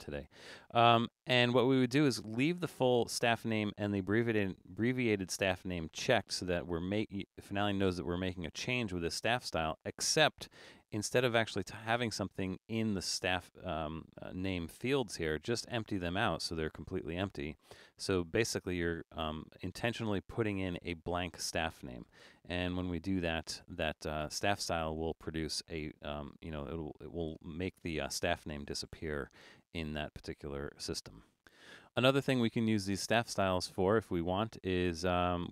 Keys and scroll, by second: 11.6 BackSpace, 15.1 BackSpace.